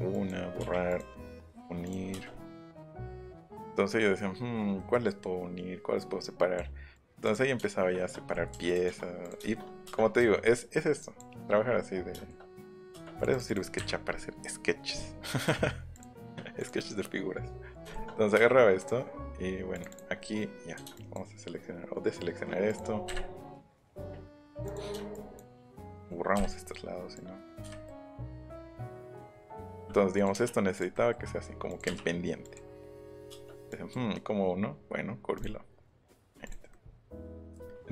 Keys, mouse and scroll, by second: 0.1 click, 0.7 l, 0.9 click, 1.8 click, 2.1-2.9 scroll up 4, 2.2 space, 3.4 middle click, 3.9 middle click, 4.8 middle click, 6.2 click, 6.9 click, 7.9 shift+middle click, 8.7 click, 10.2 e, 11.0 click, 11.4 middle click, 12.0 middle click, 12.9 space, 13.2 click, 13.7 Delete, 15.9 click, 17.7 click, 17.9 shift+middle click, 18.7 click, 19.7 click, 19.9 click, 20.1 middle click, 20.9 ctrl+shift+click, 22.7 click, 24.3 click, 24.5 click, 25.1 ctrl+shift+click, 25.9 click, 26.5-26.9 scroll up 1, 27.1 click, 27.6 Delete, 27.7-28.2 scroll up 2, 27.8 middle click, 28.9 click, 29.0 click, 29.2 click, 29.4 middle click, 29.7 m, 29.9 middle click, 30.1 click, 30.3 Up, 30.8 click, 31.7 click, 31.8 Up, 32.4 click, 33.3 space, 33.7 click, 35.3 click, 36.4 click, 36.9 middle click.